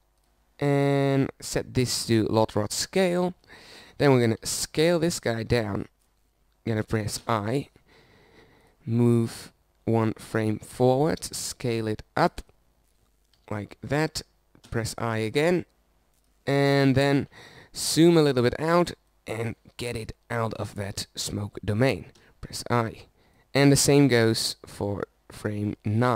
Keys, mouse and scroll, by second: 4.6 middle click, 5.9 s, 8.7 i, 10.2-12.2 drag, 12.8 s, 14.9 s, 16.3 i, 21.0-22.7 drag, 23.8 i, 24.4 middle click, 25.0-26.1 drag.